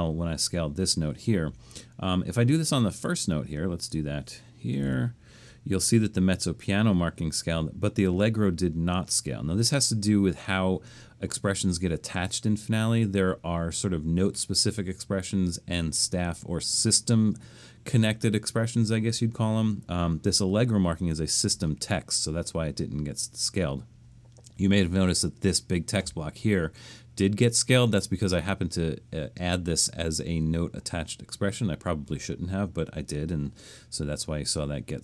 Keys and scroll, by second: 4.6-5.4 typing.